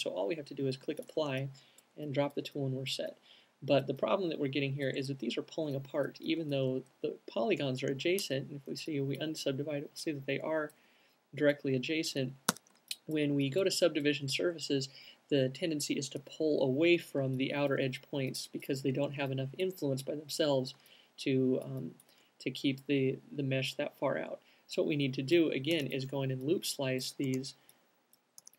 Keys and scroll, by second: 1.5 alt+q, 7.8 alt+Tab, 12.8 alt+Tab, 26.1 alt+c, 26.7 q.